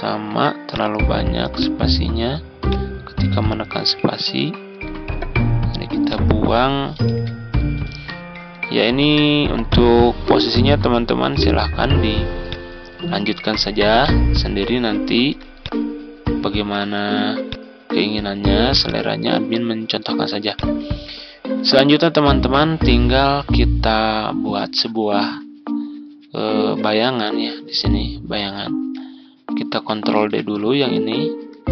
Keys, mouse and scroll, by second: 0.0 Delete, 0.6-3.8 drag, 4.6 Delete, 5.9 click, 6.9 ctrl+d, 7.4-13.8 drag, 15.4 click, 16.8 ctrl+d, 17.3-19.2 drag, 20.4 click, 20.8 ctrl+scroll down 1, 26.6-27.8 drag, 30.0 ctrl+d, 30.5 click.